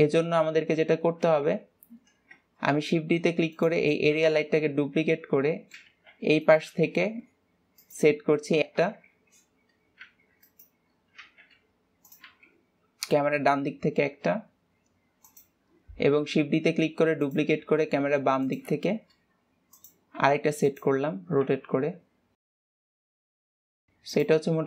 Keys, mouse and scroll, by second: 0.1 KP_0, 0.6 ctrl+s, 1.1-1.7 scroll down 2, 1.8 KP_7, 3.3 shift+d, 4.8 KP_1, 5.5-5.9 scroll down 2, 5.9 shift+middle click, 6.2 g, 9.4 KP_7, 10.5 g, 21.9 KP_2, 22.9 g, 23.7 KP_7, 24.2 r.